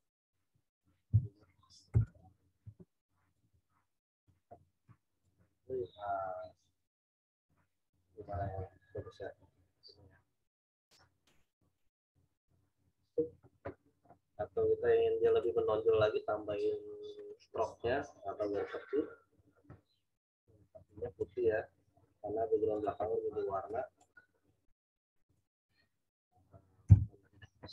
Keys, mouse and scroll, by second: 1.9 m, 2.0 click, 2.6 e, 3.3 click, 4.8 v, 5.2 click, 15.2 click, 20.8 click, 26.8 8.